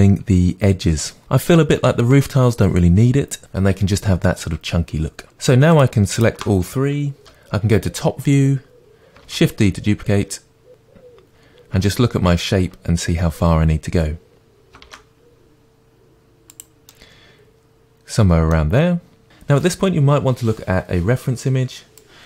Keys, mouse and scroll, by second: 5.7-6.5 shift+drag, 7.2 KP_7, 8.2-9.3 scroll down 2, 9.3 shift+d, 10.7 click, 11.3 scroll down 1, 11.9-16.6 shift+middle drag, 14.9 shift+d, 16.6 click, 16.9-21.4 middle drag.